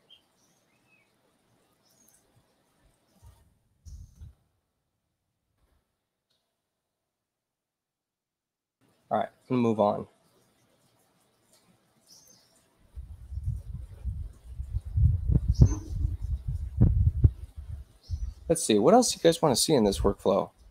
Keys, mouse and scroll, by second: 1.8 click, 3.0-5.1 typing, 8.2 click, 12.0 click.